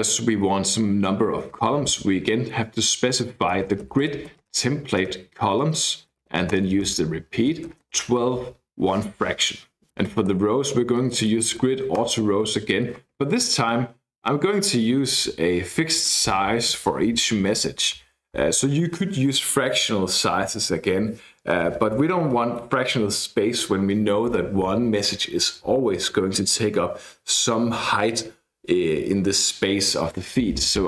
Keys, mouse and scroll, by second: 3.3-5.0 typing, 6.1 e, 6.5 Return, 7.2-12.1 typing.